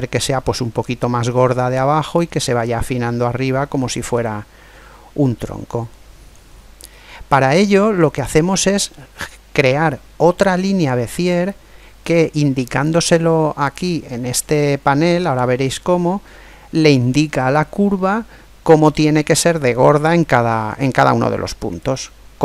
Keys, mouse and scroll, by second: 2.4-4.0 middle drag, 6.3-11.0 middle drag.